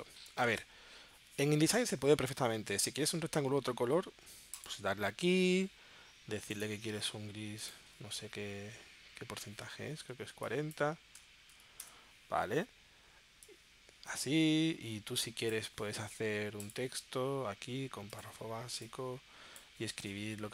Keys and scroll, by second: 0.7 super+Tab, 11.2 4, 11.5 0, 11.8 Return.